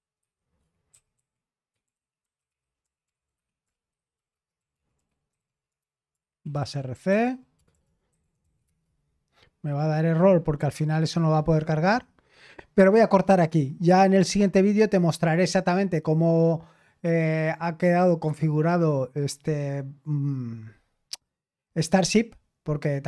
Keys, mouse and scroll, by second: 0.0-9.1 typing.